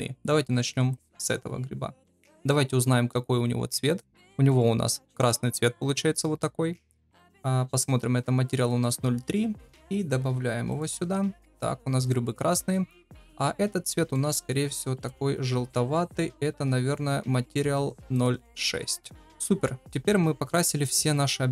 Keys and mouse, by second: 0.8 click, 4.5-4.9 shift+middle drag, 9.8-11.0 drag, 13.2 click, 14.1 shift+middle click, 15.0-18.5 drag.